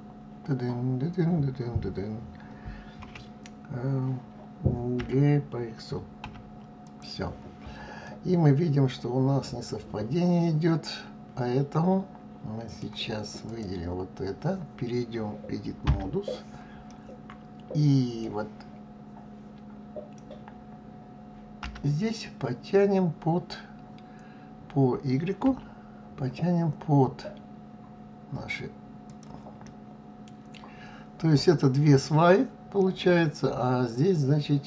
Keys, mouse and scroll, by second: 8.0-11.1 middle drag, 13.4 click, 15.8 Tab, 16.8-19.9 middle drag, 21.6 g, 29.6-34.6 middle drag.